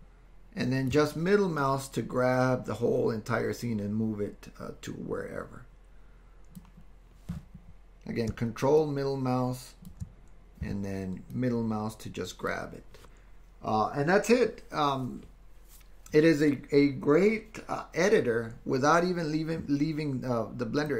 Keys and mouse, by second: 1.6-6.7 middle drag, 8.9 ctrl+click, 11.3-12.5 middle drag.